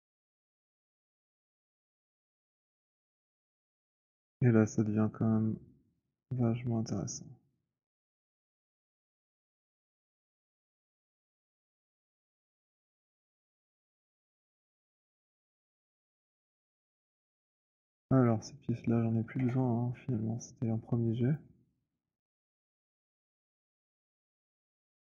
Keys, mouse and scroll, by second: 0.0 click, 0.6-1.1 scroll, 3.5 middle click, 3.5 alt+click, 5.1 alt+middle click, 5.8 alt+middle click, 8.0 alt+click, 9.8 click, 11.3 click, 12.3 click, 12.8 click, 14.9 click, 16.2 click, 16.8 alt+click, 17.6 alt+click, 17.8 w, 18.3 click, 19.3 ctrl+h, 21.1 alt+click, 21.9 alt+middle click, 22.4 click, 23.4 alt+middle click.